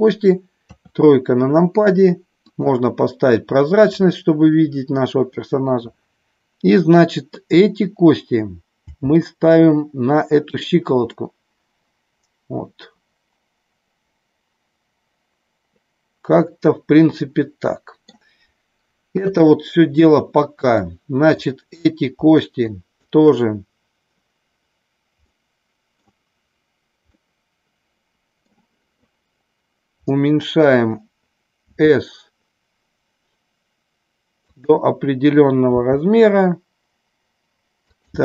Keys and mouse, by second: 0.6 KP_3, 2.3 click, 8.8 g, 10.4 click, 11.1-18.1 middle drag, 19.1 KP_3, 20.8 click, 22.7 shift+click, 25.3 middle click, 27.1-28.6 middle drag, 30.1 middle click, 31.7 s, 34.5 click, 35.7 g, 37.8 click.